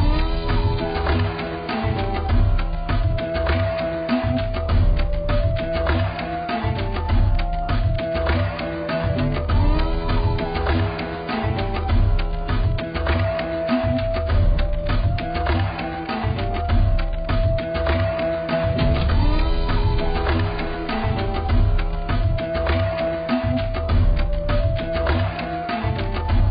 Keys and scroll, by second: 5.5 ctrl+z, 20.4 ctrl+a, 23.2-26.3 typing.